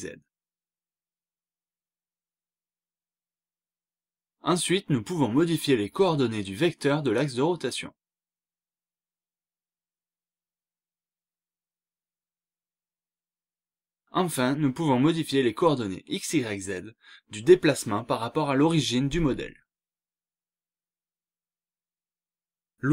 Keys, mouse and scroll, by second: 0.2-0.7 scroll up 1, 0.8-1.2 scroll down 1, 2.6-3.5 scroll down 2, 4.1 click, 4.6 scroll up 1, 5.3 click, 5.8 scroll down 1, 6.8 click, 7.7-9.3 scroll up 3, 9.5-12.0 scroll down 2, 12.0-12.3 scroll up 1, 14.1-14.6 scroll up 1, 15.3 click, 16.1 scroll up 1, 16.8 click, 17.1-17.9 scroll up 2, 18.3-18.6 scroll up 2, 19.5 click, 20.0-20.9 scroll up 2, 20.9-21.9 scroll down 2, 21.9 scroll down 1, 22.2-22.6 scroll up 2.